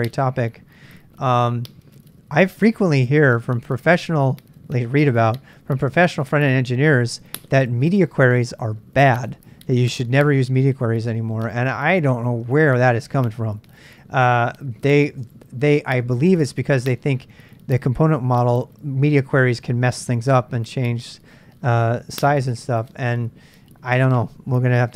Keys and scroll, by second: 15.2 Return.